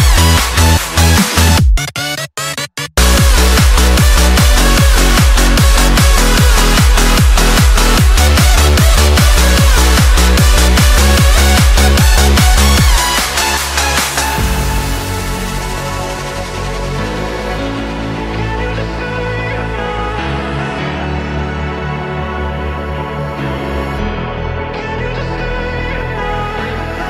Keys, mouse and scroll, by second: 3.9 click, 5.0 click, 5.5-6.0 shift+middle drag, 6.0 click, 6.4-7.2 shift+middle drag, 7.2-7.5 scroll down 2, 7.5-7.9 shift+middle drag, 7.9 scroll up 1, 8.1-10.5 middle drag, 10.5 click, 10.9 shift+click, 11.5 click, 11.9 shift+click, 12.2-12.9 shift+middle drag, 12.9 shift+d, 13.3 r, 14.7 KP_7, 15.3-16.2 shift+middle drag, 16.2 r, 18.2-19.4 middle drag, 19.4 r, 21.6-22.6 middle drag, 22.6 click, 23.2 click, 24.0 r.